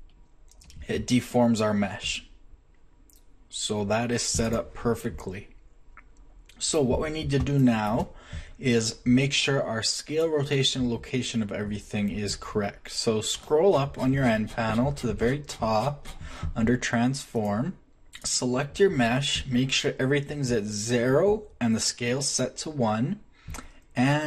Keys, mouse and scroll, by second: 5.1 middle click, 17.9 n.